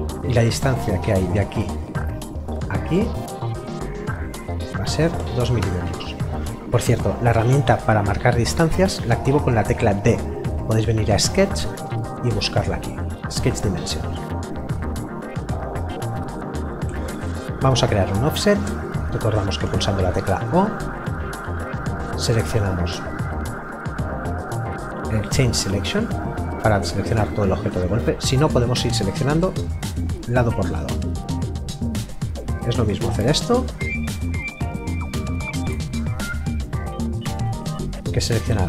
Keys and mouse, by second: 0.1 d, 1.2 click, 5.2 KP_2, 5.6 Return, 10.5 click, 14.7 Escape, 25.9 click.